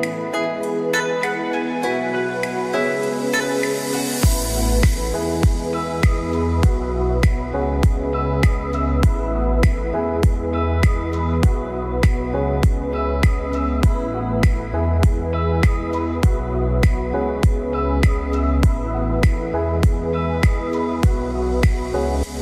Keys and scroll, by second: 4.6 ctrl+alt+shift+e, 16.9 ctrl+a, 19.2 ctrl+d.